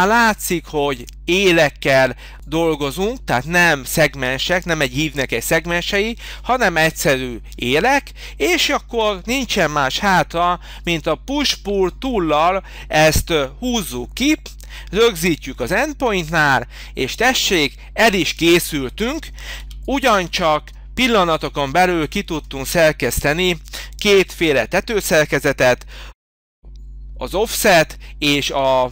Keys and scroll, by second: 9.9 p, 19.6 h.